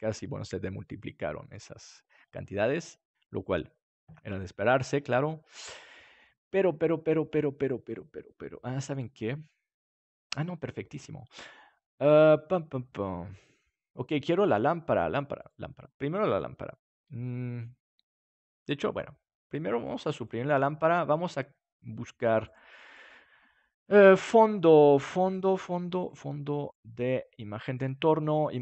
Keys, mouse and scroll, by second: 5.0-6.8 middle drag, 15.2 middle click, 15.3-17.2 drag, 19.4-28.6 drag.